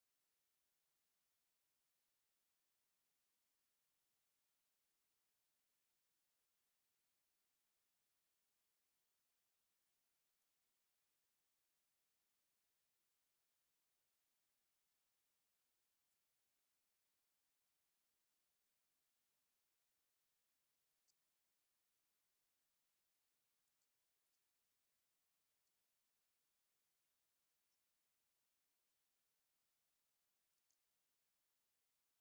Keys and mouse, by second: 2.4 click, 3.3 click, 4.1-5.7 drag, 8.1-10.1 drag, 10.7 click, 11.5 click, 12.1 click, 18.3 click, 20.7 click, 21.2-24.6 right drag, 25.7-29.2 right drag, 30.2-31.8 right drag.